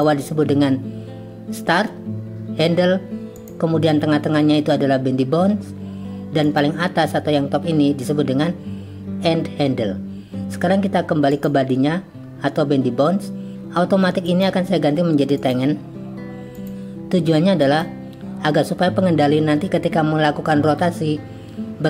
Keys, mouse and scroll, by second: 11.3 click, 14.4-15.6 drag, 16.5-17.8 drag.